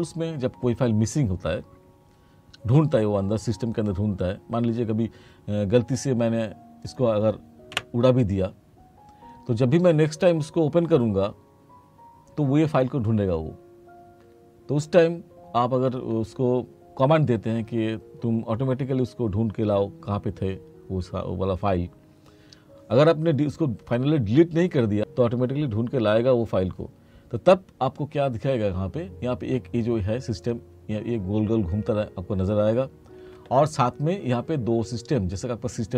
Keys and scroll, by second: 7.8 Delete.